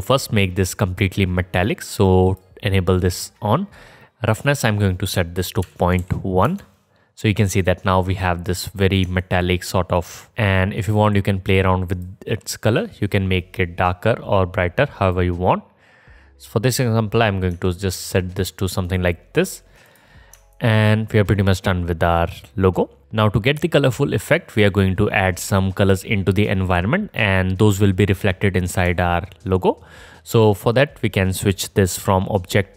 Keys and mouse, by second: 1.0-7.5 drag, 1.0-7.5 middle drag, 1.0-7.5 right drag, 9.2-10.3 alt+drag, 10.8 click, 10.8 right click, 11.9 click, 11.9 right click, 18.0 ctrl+z, 18.0 ctrl+click, 18.8 click, 19.8 click, 20.5-24.9 alt+drag, 24.9-27.1 right drag, 28.8-30.5 alt+drag, 32.4-32.7 drag, 32.4-32.7 middle drag, 32.4-32.7 right drag.